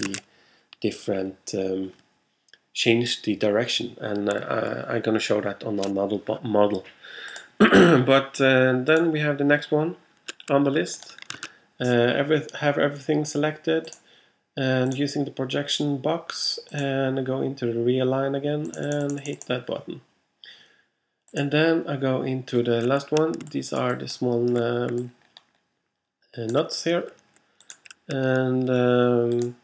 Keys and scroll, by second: 11.4 super+a.